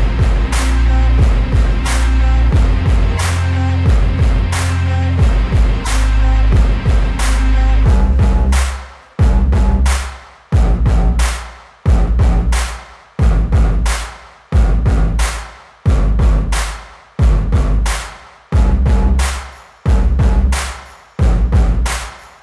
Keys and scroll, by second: 7.9 ctrl+-, 8.3 space, 9.2 ctrl+-, 9.8 ], 10.1 ], 11.1 ], 11.5 ], 12.3 ], 13.1 ], 14.5 ], 17.8 ctrl+alt+z, 18.5 ctrl+alt+z, 19.0 space, 21.5 space.